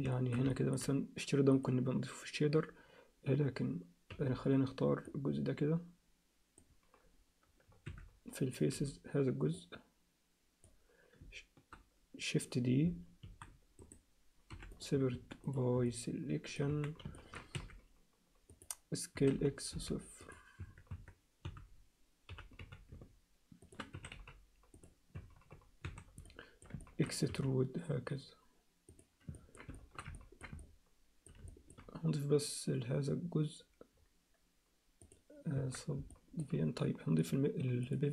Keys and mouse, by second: 0.1 alt+shift+middle click, 0.5 ctrl+alt+middle click, 1.6 click, 4.1 b, 7.9 3, 8.7 b, 13.2 shift+d, 14.5 p, 15.2 Tab, 15.9 alt+middle click, 16.7 Tab, 17.2 ctrl+alt+middle click, 17.5 2, 19.2 s, 20.6 Tab, 20.9 Tab, 21.4 a, 22.3 g, 23.9 s, 25.1 Tab, 25.4 Tab, 25.8 a, 26.2 alt+middle click, 26.8 ctrl+alt+middle click, 27.3 e, 29.3 ctrl+alt+middle click, 29.7 alt+shift+middle click, 30.1 ctrl+alt+middle click, 30.7 alt+middle click, 31.5 alt+shift+middle click, 35.0 click, 35.5 Tab, 36.1 alt+middle click, 37.2 click, 38.0 click.